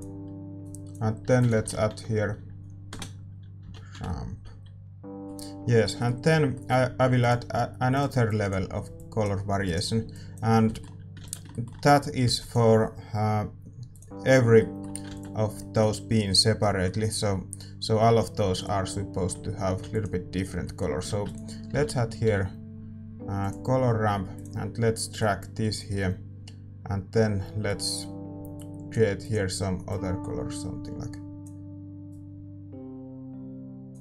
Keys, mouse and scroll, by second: 4.8 ctrl+s, 4.8 middle click, 18.5-34.0 drag.